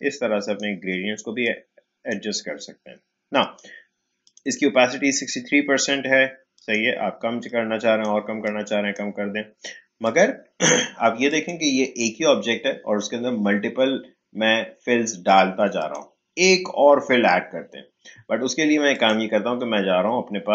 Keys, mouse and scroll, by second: 6.5-10.0 drag, 15.8 click, 18.9 click.